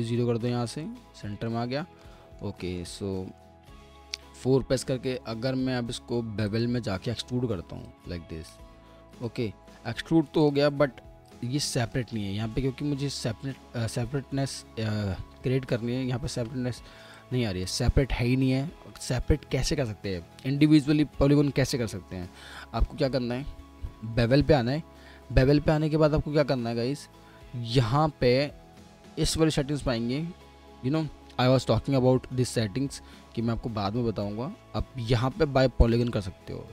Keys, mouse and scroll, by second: 1.1-1.9 typing, 1.5 alt+middle click, 3.7 4, 9.8 middle click, 16.2 ctrl+z, 18.9 ctrl+z, 19.3 ctrl+z.